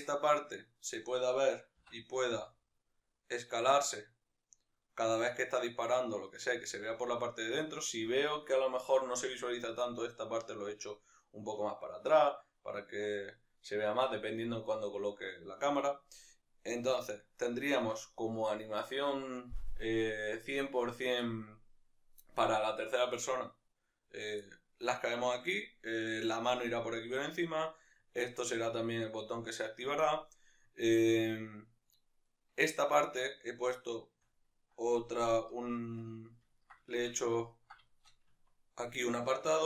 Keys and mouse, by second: 0.3-1.8 right drag, 1.8 s, 6.4 right click, 9.6-24.5 right drag, 24.5-27.4 middle drag, 27.4-33.4 right drag, 33.4-39.6 shift+middle drag, 35.4 KP_Decimal, 38.5 Tab.